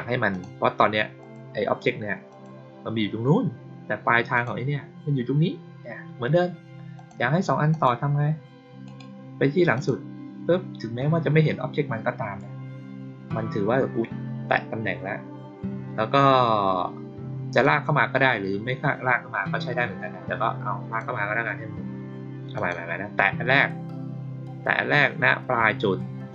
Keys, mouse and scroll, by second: 0.2 click, 1.1 click, 2.2 click, 4.2 click, 6.9 click, 7.6 click, 8.8 right click, 9.6 click, 17.5-20.9 drag, 22.4 click.